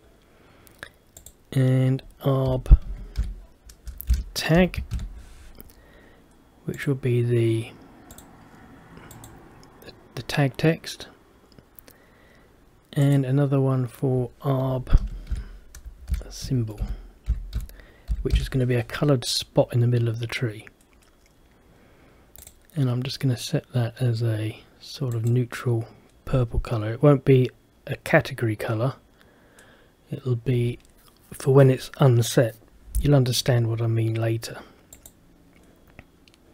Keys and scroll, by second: 4.2 shift+-, 16.2 shift+-.